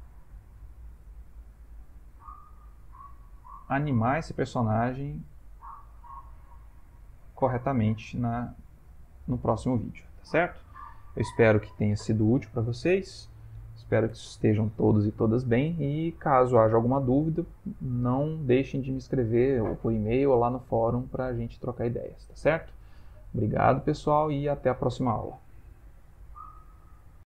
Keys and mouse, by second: 0.0 r, 5.3 click, 6.0 r, 7.8 click, 8.3 r, 10.0 ctrl+middle click, 10.2 ctrl+middle click, 10.9 shift+middle click, 11.3 shift+middle click.